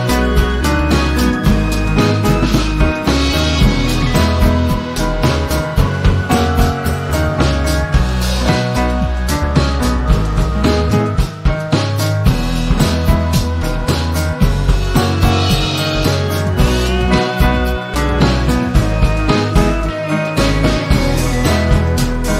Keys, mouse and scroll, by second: 0.5 p, 1.5 click, 5.3 ctrl+shift+v, 6.4 v, 6.8 shift+click, 7.8 shift+click, 8.5 shift+click, 9.4 click, 10.9 shift+click, 11.7 click, 12.3-12.7 ctrl+scroll up 2, 12.7 click, 13.6-14.0 click, 14.5 Delete, 15.8-17.1 drag, 21.4 ctrl+scroll down 1.